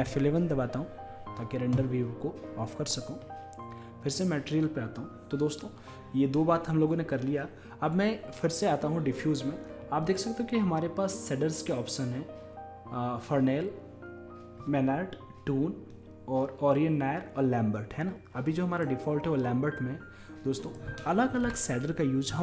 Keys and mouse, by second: 0.0 F11, 4.2-10.1 middle drag, 10.1-11.8 drag, 20.7-22.4 drag.